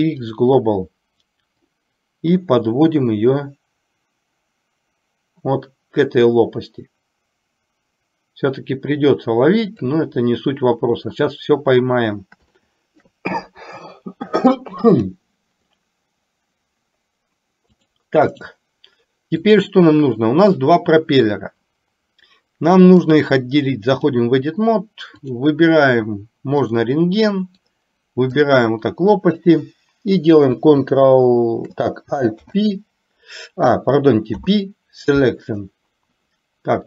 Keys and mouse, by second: 1.9-9.9 drag, 12.8 shift+middle click, 17.8 click, 19.5 click, 23.0-24.4 drag, 25.3 click, 27.6 click, 32.5 alt+p, 34.4 p.